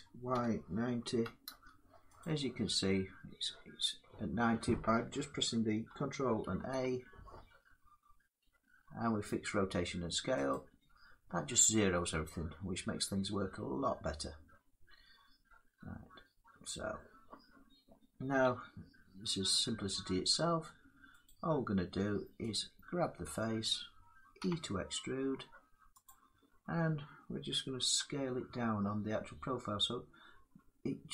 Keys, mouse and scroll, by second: 0.0-1.2 typing, 1.9 click, 6.3 ctrl+a, 8.8-9.7 drag, 10.4 click, 12.4-15.3 drag, 16.8-18.1 middle drag, 18.1 Tab, 20.9 click, 21.8-24.1 drag, 24.1 e, 25.7-27.5 drag, 27.5 s, 28.4-30.8 drag.